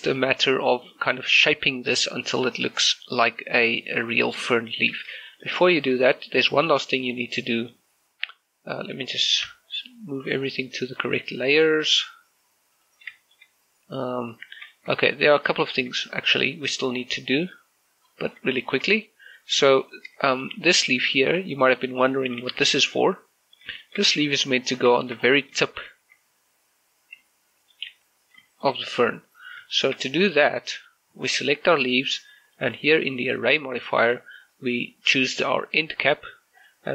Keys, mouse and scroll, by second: 0.1 shift+middle click, 1.1-1.5 scroll up 1, 1.5 middle click, 5.3 shift+middle click, 6.1 shift+middle click, 7.8 middle click, 8.1 click, 10.3 m, 11.1 click, 12.3-13.1 scroll down 1, 13.5 click, 14.0 shift+middle click, 14.3 scroll up 1, 14.8 right click, 15.2 shift+middle click, 15.8-16.2 shift+scroll up 2, 18.4 click, 19.1 scroll up 1, 19.3 shift+middle click, 20.2 middle click, 20.6 right click, 21.1 shift+middle click, 21.5 right click, 24.0-24.5 scroll down 1, 24.6 shift+middle click, 24.9 scroll up 1, 25.0 g, 25.5 click, 25.7 shift+middle click, 25.9 scroll up 1, 26.5 shift+middle click, 26.8 r, 28.4 ctrl+click, 28.7 g, 29.1 click, 29.3 shift+middle click, 29.5 scroll up 1, 29.7 g, 30.2 click, 30.5 shift+middle click, 31.6 right click, 33.3 click, 36.5 click.